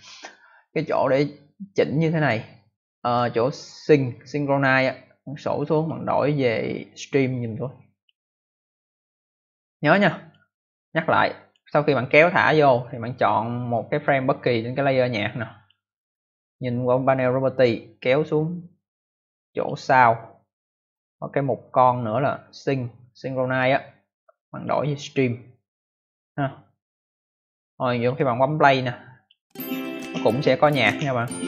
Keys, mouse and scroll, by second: 5.6 click, 7.8 click, 9.9 click, 11.4 click, 15.5 click, 18.2 click, 24.4 click, 25.8 click, 27.7 click, 29.1 click, 29.2 click.